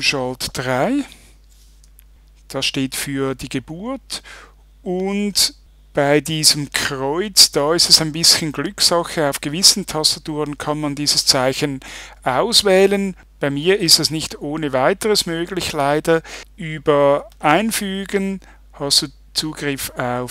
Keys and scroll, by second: 0.7 shift+3.